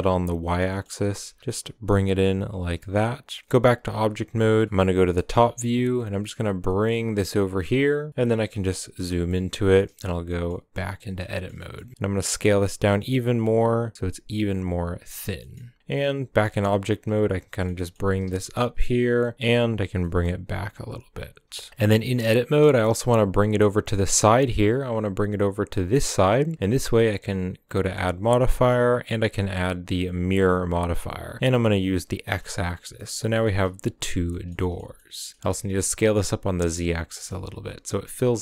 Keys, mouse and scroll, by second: 0.4 shift+middle click, 0.9 scroll up 2, 1.1 s, 3.4 Tab, 3.8 KP_7, 4.6 scroll down 1, 4.6-6.0 shift+middle drag, 6.0 g, 8.5 KP_Decimal, 9.2 scroll up 1, 9.2-10.7 middle drag, 10.7 Tab, 10.8 scroll down 2, 10.9-11.7 middle drag, 11.7 scroll up 1, 11.8 s, 15.4 middle click, 15.8 g, 17.4 scroll down 1, 17.5-17.9 shift+middle drag, 17.9 g, 19.2 middle click, 19.3 g, 21.7 Tab, 22.0 middle click, 22.9 g, 26.5-30.6 middle drag, 30.6 click, 31.4-32.1 drag, 32.4 middle click, 32.5-32.9 scroll up 5, 32.9 g, 34.0 scroll down 5, 34.3-35.4 shift+middle drag, 35.4 s, 37.1 g.